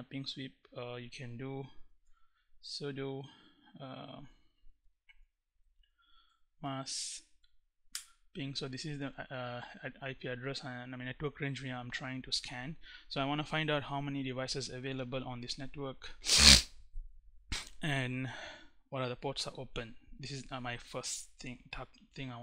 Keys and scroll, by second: 1.2-2.3 typing, 4.1-5.9 typing, 6.0 Right, 7.5 Return, 21.9 1.